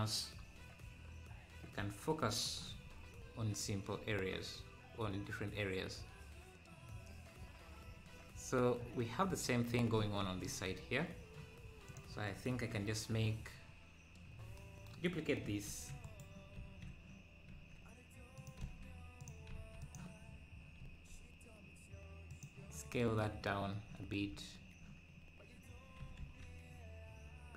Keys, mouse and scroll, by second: 2.8-3.2 scroll up 2, 3.0-5.9 right drag, 11.8 click, 13.3 KP_7, 15.6 shift+d, 17.5 s, 20.3 scroll down 1, 20.8 s, 23.5 `, 24.2 scroll up 1, 24.4 `, 26.0 g.